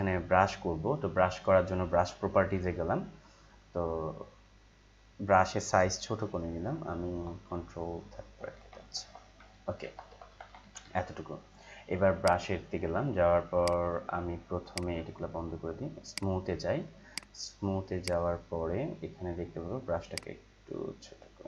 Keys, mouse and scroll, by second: 6.1-8.2 typing, 9.8-10.6 typing, 12.2-21.4 drag.